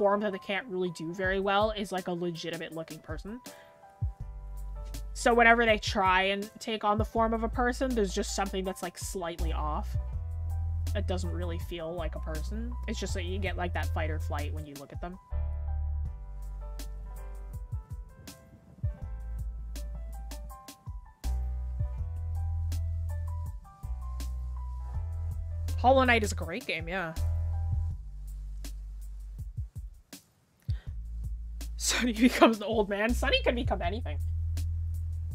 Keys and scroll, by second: 11.8-12.8 scroll down 1, 13.2-13.7 scroll up 1, 13.7 scroll, 14.2-16.3 scroll up 1.